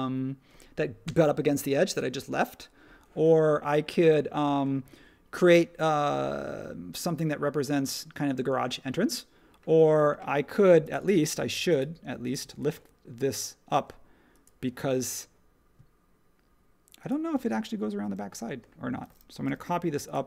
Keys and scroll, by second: 19.4 m.